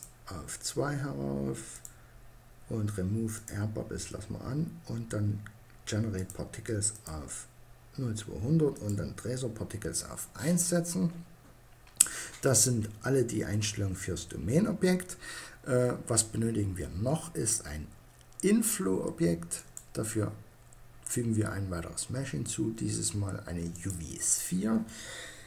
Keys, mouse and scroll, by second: 0.9-4.1 drag, 4.2-5.2 middle drag, 7.7 middle click, 9.5-11.2 middle drag, 20.3 middle click.